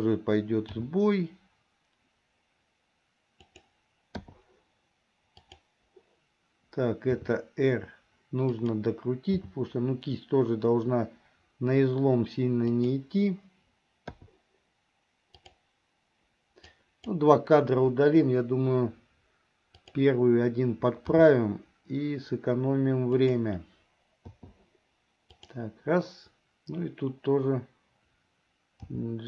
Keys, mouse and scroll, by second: 0.7 g, 4.4 i, 5.5 click, 7.3 r, 9.6 g, 14.3 i, 15.5 click, 16.7 click, 18.0 Delete, 20.0 click, 21.1 g, 24.5 i, 25.5 click, 29.0 g.